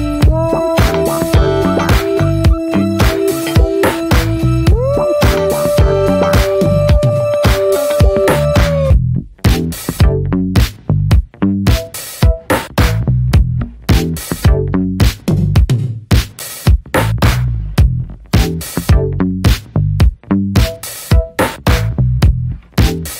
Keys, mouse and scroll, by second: 4.3-4.8 scroll down 2, 4.8-5.9 middle drag, 5.9-6.4 scroll up 5, 6.4-10.7 middle drag, 10.7-11.3 drag, 11.3 scroll down 2, 11.3 alt+middle click, 11.8 shift+a, 14.1 scroll up 4, 14.7 scroll up 1, 15.2 g, 16.1 r, 17.0 alt+middle click, 17.8-21.7 shift+middle drag, 21.9-22.8 drag, 22.8 scroll down 2.